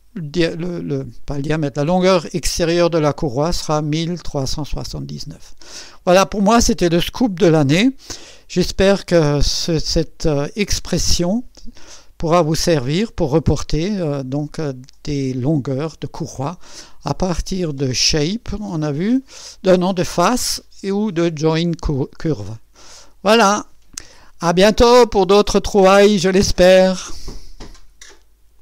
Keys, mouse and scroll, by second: 5.6 click, 6.3 click, 8.3 click, 10.4 click, 17.6 click, 23.1 click, 27.1 right click, 28.5 click.